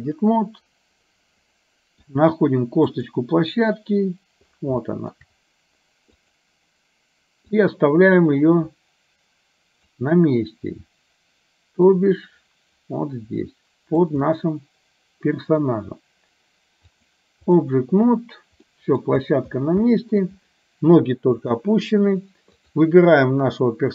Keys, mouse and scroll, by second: 1.7 middle click, 2.9 click, 4.9 shift+middle click, 6.2 click, 7.5-10.0 drag, 12.0-14.1 drag, 14.2-15.7 middle drag, 17.0 click, 18.7 middle click, 19.9 shift+middle drag.